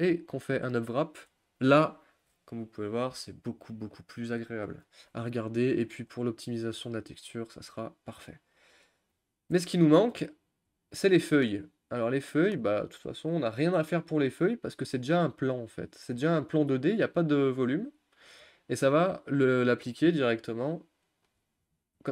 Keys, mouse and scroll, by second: 0.8 u, 6.1 click, 10.7 Tab, 11.0 scroll up 1, 11.1-12.1 middle drag, 12.1 click, 12.4-12.7 middle drag, 12.7-14.7 scroll up 3, 14.7 click, 15.1-16.7 middle drag, 16.7-17.0 drag, 17.0-17.4 middle drag, 17.4-17.8 scroll up 2, 17.8-18.4 middle drag, 18.4-22.0 scroll down 2, 22.0 Tab.